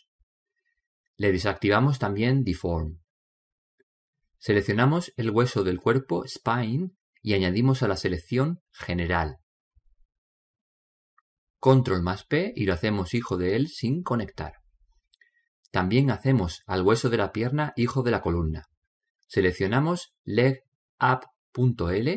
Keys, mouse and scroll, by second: 2.2-4.4 middle drag, 3.2 click, 6.9 right click, 10.0 right click, 12.4 ctrl+p, 20.6-22.1 middle drag, 21.1 right click.